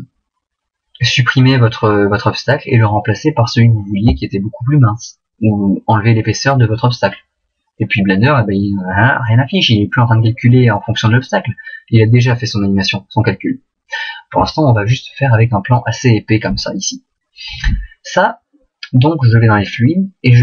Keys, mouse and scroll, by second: 16.3 middle click.